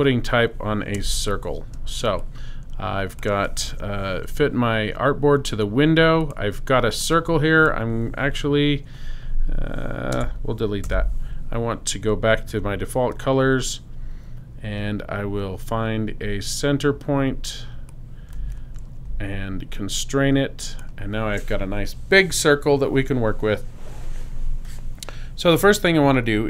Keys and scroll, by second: 1.0 BackSpace, 1.7 space, 3.7 super+0, 10.1 BackSpace, 10.8 l, 12.5 d.